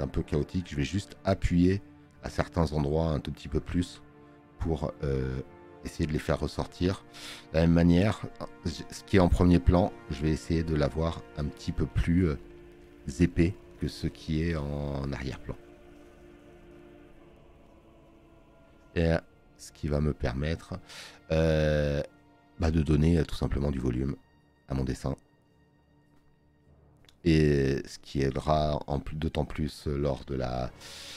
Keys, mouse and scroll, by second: 16.2 space, 16.4 click, 30.8 space.